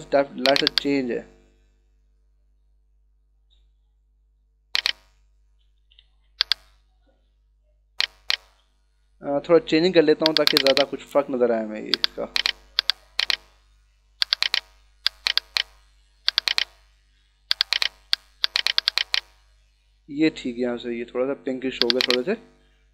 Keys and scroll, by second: 5.7 [.